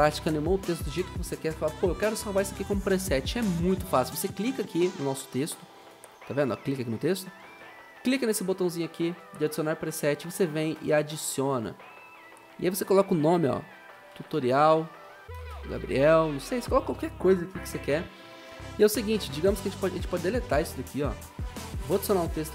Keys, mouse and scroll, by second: 0.9 click, 0.9 0, 6.1 click, 13.9-16.5 typing, 16.8 Return, 20.1 Delete.